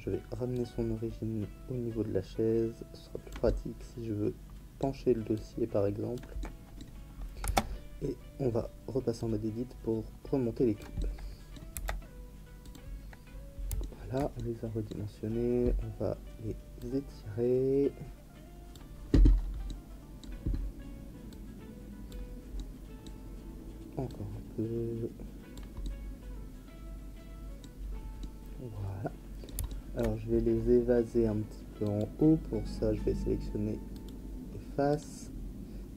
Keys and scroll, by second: 7.4 Tab, 11.7 s.